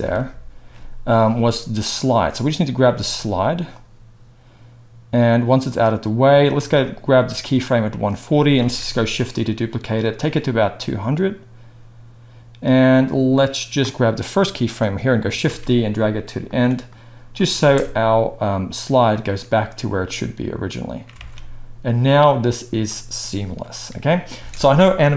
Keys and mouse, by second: 0.0 shift+Left, 1.9-3.7 middle drag, 3.7-9.7 drag, 8.6 shift+d, 9.7-10.1 middle drag, 10.1-16.5 drag, 15.4 shift+d, 16.5-16.8 middle drag, 16.8-25.1 drag, 17.5 space, 21.2 alt+a, 24.3 space.